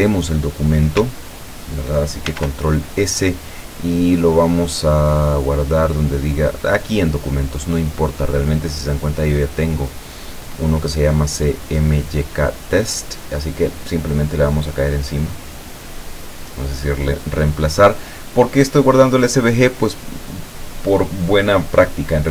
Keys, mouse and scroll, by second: 2.4 ctrl+s, 6.6 click, 12.8 click, 15.3 click, 16.4 click.